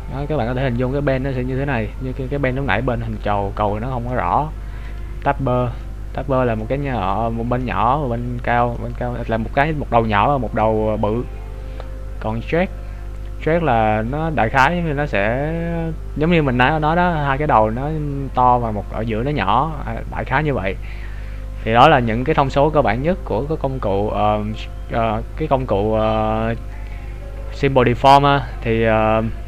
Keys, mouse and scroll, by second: 5.2 click, 5.8 middle click, 8.4 middle click, 12.7 click, 27.6-28.2 scroll up 5, 28.2-28.8 scroll down 2, 28.8 scroll up 1.